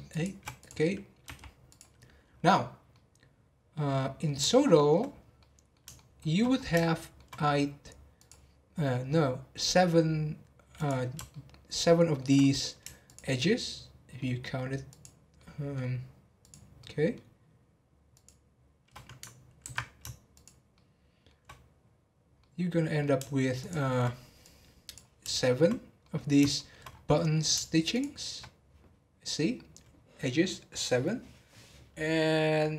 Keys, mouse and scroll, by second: 0.1 shift+click, 0.6 click, 2.2-2.9 scroll down 5, 2.9-5.0 middle drag, 5.0 scroll down 2, 5.3-6.5 middle drag, 6.5 scroll up 2, 6.8-8.1 shift+middle drag, 8.1 click, 8.8 scroll up 1, 9.1 middle click, 9.7 scroll up 1, 10.7 click, 11.3-13.0 shift+middle drag, 13.0 shift+click, 13.4-14.9 shift+middle drag, 14.9 shift+click, 15.3-16.4 shift+middle drag, 16.4 shift+click, 16.7-18.1 shift+middle drag, 18.1 shift+click, 20.3 shift+click, 20.7 shift+middle click, 21.5-22.4 scroll up 1, 22.4-23.6 middle drag, 23.6 shift+click, 25.4-26.9 middle drag, 26.9 scroll up 2, 27.1 middle click, 27.9 shift+click, 31.7-32.6 scroll down 6, 32.6-32.7 middle drag.